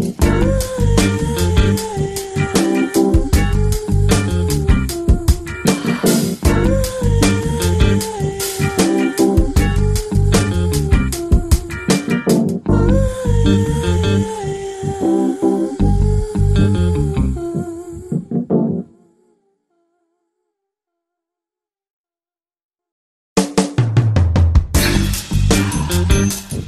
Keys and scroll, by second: 2.8-4.3 typing, 9.2 x, 9.9 ], 10.1 ].